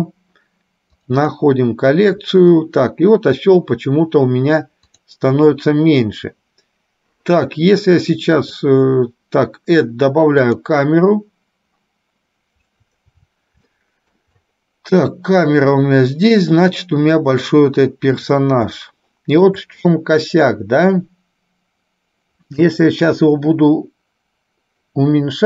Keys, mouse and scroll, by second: 5.0 click, 8.4-10.8 drag, 13.8 shift+middle click, 18.3 click, 18.9 shift+middle click.